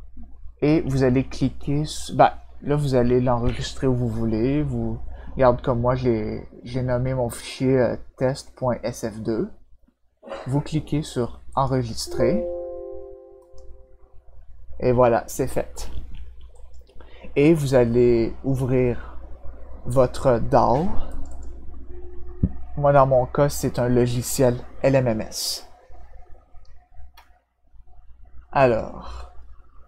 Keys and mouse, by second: 11.5 click, 13.3 click, 16.5 click, 21.1 click, 21.2 click.